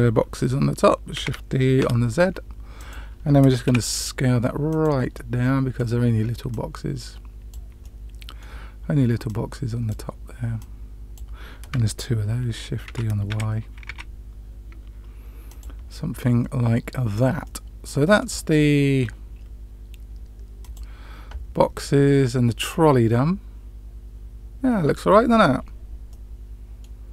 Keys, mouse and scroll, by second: 1.1 shift+d, 3.6 s, 5.1-5.7 middle drag, 6.4-7.5 drag, 7.7-8.4 middle drag, 9.2 click, 10.5-11.1 drag, 12.8 shift+d, 17.4-18.2 middle drag, 18.5-19.0 scroll down 1, 20.9 click.